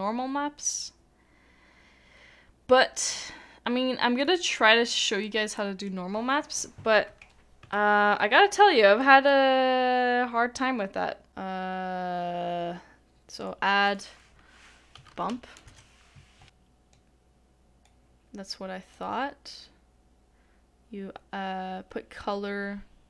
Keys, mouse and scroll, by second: 5.2 middle click, 7.6 middle click, 7.7 shift+middle click, 9.0 shift+middle click, 11.3 Delete.